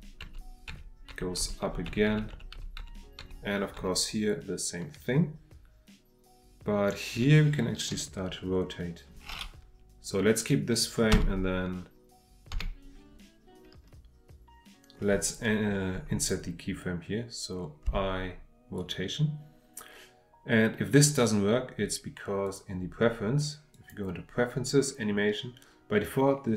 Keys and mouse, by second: 22.5-23.9 drag.